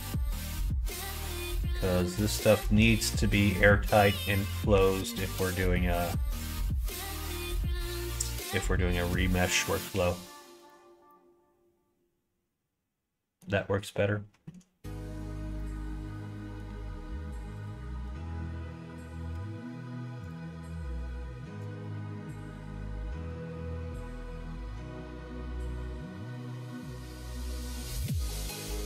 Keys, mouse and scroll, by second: 3.4 middle click, 3.8 middle click, 4.7 ctrl+f, 9.9 ctrl+e, 11.1-13.4 middle drag, 15.6-16.7 middle drag, 17.6 alt+click, 19.3 ctrl+f, 21.8 middle click, 23.1 ctrl+r.